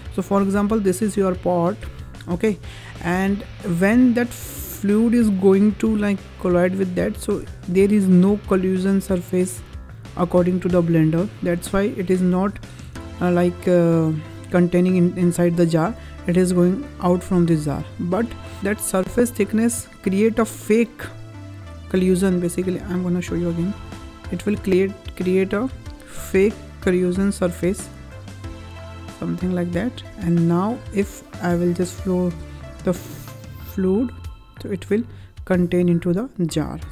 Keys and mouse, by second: 0.1-2.3 drag, 4.9-7.9 drag, 8.3-10.1 drag, 10.7 click, 16.4-17.6 drag, 20.6-22.1 drag, 22.8 ctrl+click, 24.0-25.5 drag, 26.3-30.0 drag, 30.8-32.1 drag, 32.5 click, 33.4 click, 34.4 click, 35.5 click, 36.3 click.